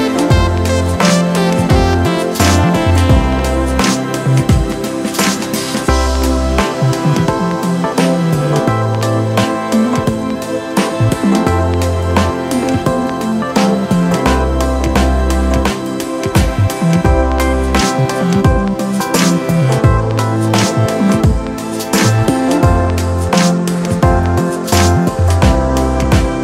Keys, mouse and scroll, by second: 0.0 alt+shift+click, 17.2 ctrl+t, 18.2 alt+shift+click, 24.7 alt+shift+click.